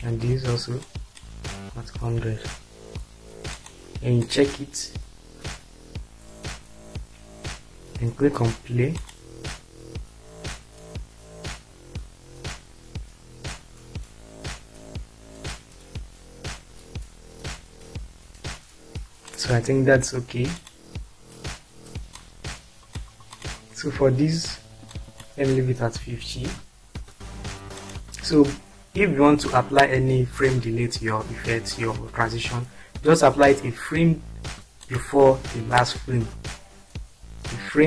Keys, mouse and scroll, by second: 0.9 click, 1.7-2.1 typing, 3.5 click, 4.3 click, 4.8 drag, 8.9 click, 19.3 click, 22.2 click, 23.3 click, 24.9 click, 26.1-26.5 typing, 34.9 click, 35.9 click.